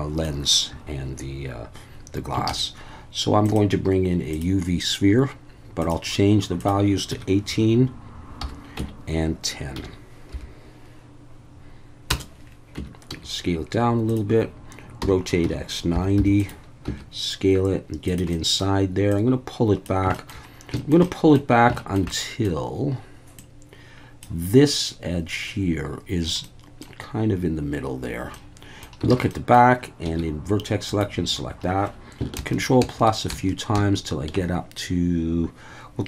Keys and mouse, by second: 2.5 shift+a, 5.8 click, 6.6-12.3 drag, 12.8 Tab, 13.1 s, 14.1 click, 15.0-16.8 typing, 16.4 click, 18.1 click, 18.4 middle click, 19.1 click, 20.2 shift+middle click, 20.8 shift+middle click, 21.1 middle click, 21.8 shift+middle click, 22.1 middle click, 23.4 click, 26.5 middle click, 28.4 click, 29.1 alt+a, 29.3 click, 30.0 1, 32.4 ctrl+KP_Add, 32.8 ctrl+KP_Add, 33.3 ctrl+KP_Add, 33.8 ctrl+KP_Add.